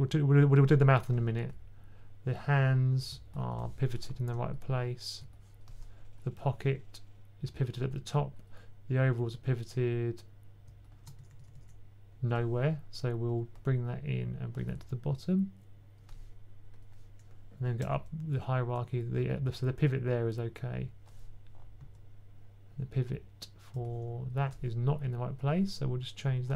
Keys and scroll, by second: 11.2 typing, 17.7 b, 21.7 b, 24.3 b.